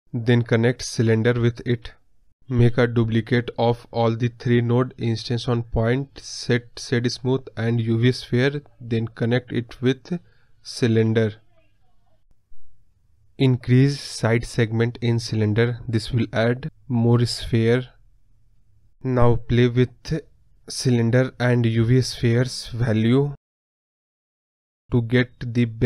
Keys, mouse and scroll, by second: 11.1 scroll up 1, 11.2-14.6 middle drag, 14.6 click, 15.3 scroll up 1, 15.4-25.8 middle drag.